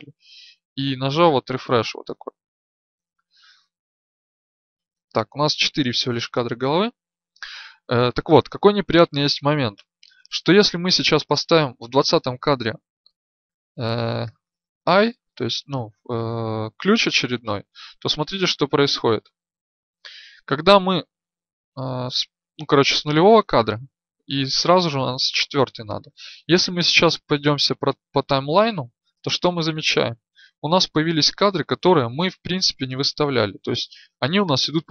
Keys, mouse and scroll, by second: 18.9-26.7 drag, 26.7 Right, 27.0 Right, 27.4 Right, 27.7 Right.